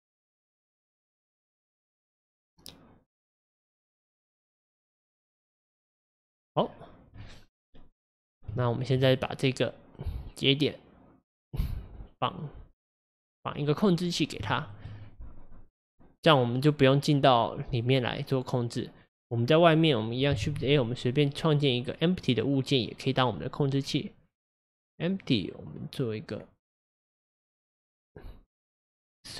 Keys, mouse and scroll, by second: 3.7-14.0 drag, 14.0-14.5 scroll down 3, 14.5-19.1 shift+middle drag, 19.1 click.